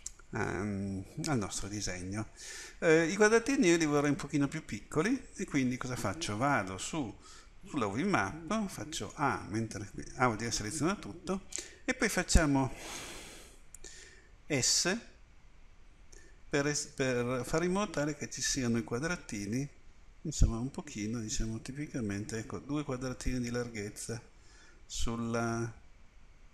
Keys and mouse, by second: 8.7 a, 14.5 s.